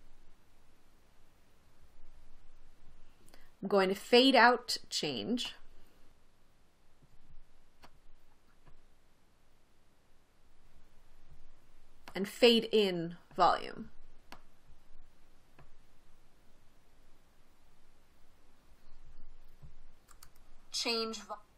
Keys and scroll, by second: 20.6 space.